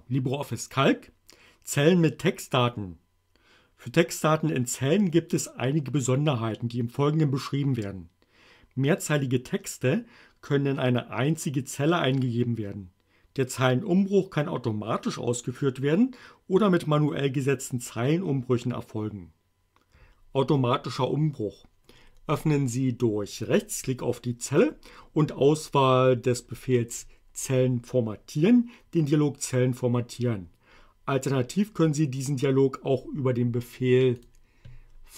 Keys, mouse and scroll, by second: 23.4 right click, 34.2 click.